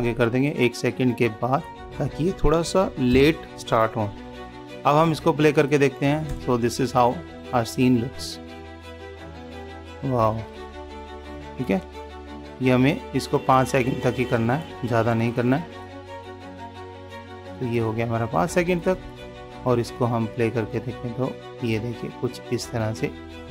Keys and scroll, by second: 4.8 ctrl+s.